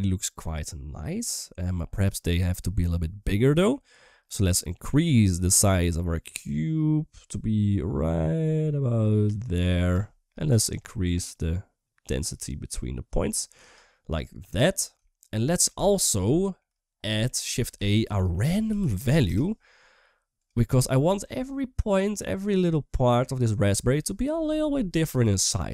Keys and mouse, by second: 1.9 shift+middle click, 2.7 shift+middle click, 4.4-9.7 shift+drag, 10.5-13.4 shift+drag, 15.0 shift+middle click, 16.1 shift+middle click, 17.5 shift+a, 20.9 shift+middle click.